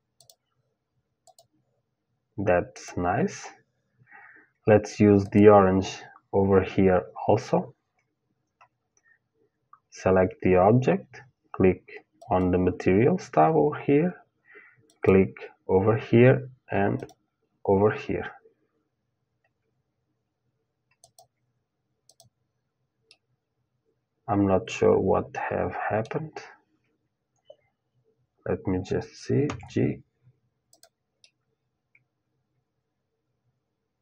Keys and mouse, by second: 4.8-16.7 drag, 20.6-23.7 drag, 23.7-24.9 middle drag, 29.1 g, 30.8-33.0 middle drag.